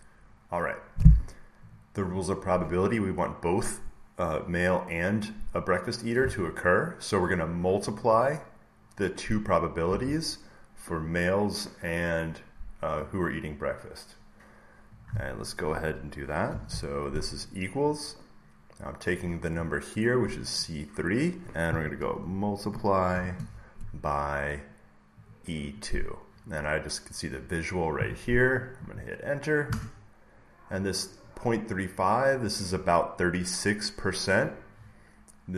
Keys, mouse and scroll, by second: 1.7-3.6 drag, 11.0-12.4 drag, 12.9 click, 14.9 click, 19.1 click, 22.1 click, 23.0 *, 25.1 typing, 29.6 Return, 30.7-32.8 drag.